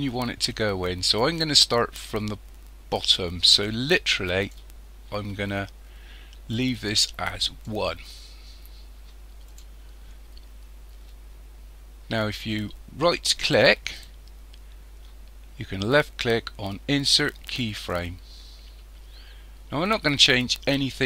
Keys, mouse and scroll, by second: 6.8 click, 14.0-17.0 right drag.